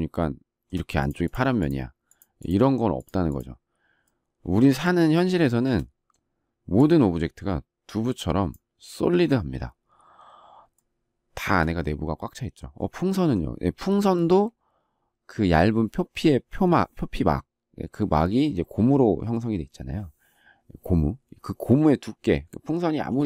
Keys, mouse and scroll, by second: 5.4 shift+middle click, 10.7 shift+middle click.